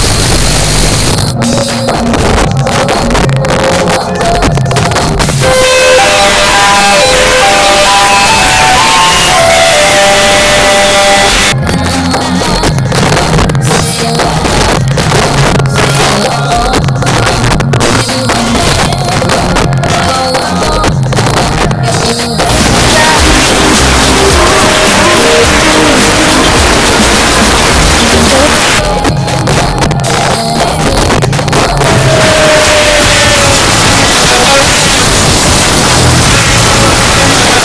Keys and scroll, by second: 11.3 Page_Down, 28.5 Page_Down, 37.5 space.